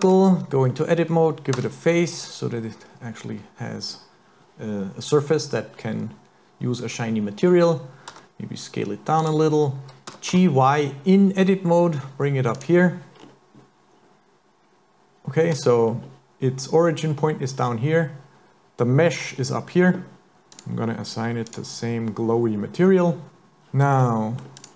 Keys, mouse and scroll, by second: 0.0 Tab, 1.6 f, 8.2 s, 10.1 g, 13.2-13.9 scroll down 4, 14.0 scroll up 1, 15.6 Tab, 15.8 scroll up 3, 19.4 scroll down 3, 20.5 click, 24.0 middle click, 24.6 click.